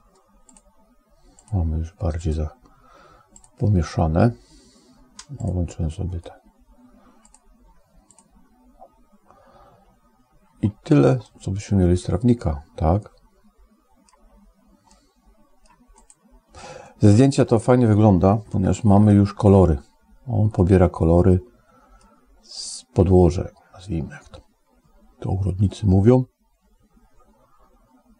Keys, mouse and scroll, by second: 0.4 click, 1.6 click, 2.1 click, 3.6 click, 5.6 click, 7.1 click, 8.3 click, 11.1-14.1 middle drag, 14.8 middle click, 15.8 click, 16.7 middle click, 18.4 shift+middle click, 20.5-22.0 middle drag.